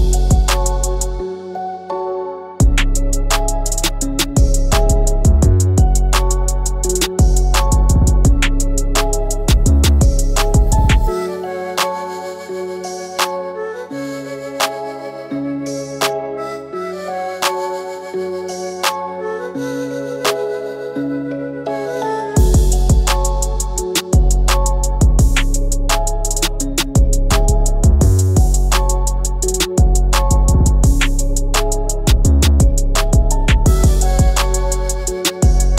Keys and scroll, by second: 9.7 ctrl+x, 13.3 ctrl+f, 23.9 ctrl+z, 25.4 ctrl+c, 26.2 f, 28.6 ctrl+x, 31.0 ctrl+alt+f.